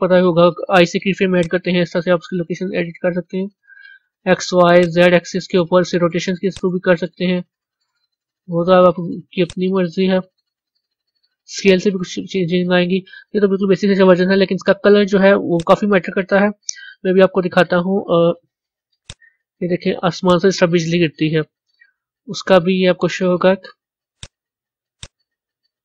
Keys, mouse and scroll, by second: 1.3-3.7 drag, 3.7 ctrl+z, 4.8-5.8 drag, 5.8 ctrl+z, 6.5-8.2 drag, 8.2 ctrl+z, 9.5-10.6 drag, 10.6 ctrl+z, 13.3-15.5 middle drag, 15.5 click, 19.0 click, 20.3 click, 24.1-25.7 drag, 25.7-25.8 middle drag.